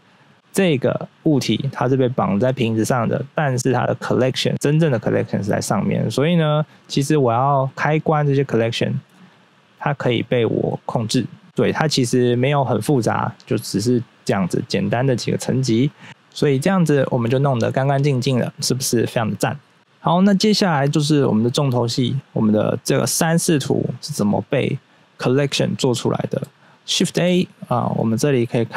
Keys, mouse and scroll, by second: 6.1 click, 6.5 click, 6.8 click, 6.8 click, 7.0 click, 7.6 double click, 7.9 click, 8.6 middle click, 9.0 middle click, 10.2 click, 10.8 click, 11.2 click, 11.4 scroll up 1, 13.9-15.1 scroll down 1, 15.1 scroll down 1, 16.0 middle click, 17.7 middle click, 18.2-18.8 scroll down 1, 21.3-21.7 scroll down 1, 22.1 scroll up 1, 27.0 shift+a.